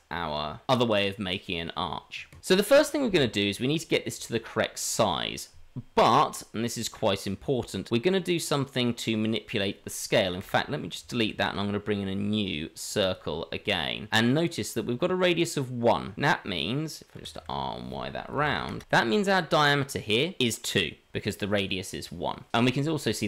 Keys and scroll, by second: 10.4 Delete, 11.3 shift+a, 17.1 r.